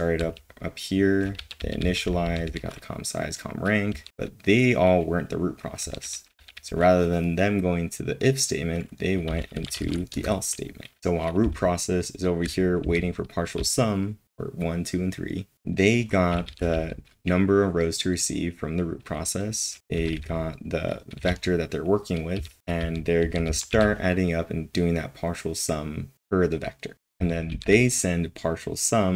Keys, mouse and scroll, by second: 0.9-6.5 typing, 9.0-12.8 typing, 11.0 ctrl+l, 13.9 typing, 15.5-17.2 typing, 19.9-21.0 typing, 22.1-23.7 typing, 26.9 typing.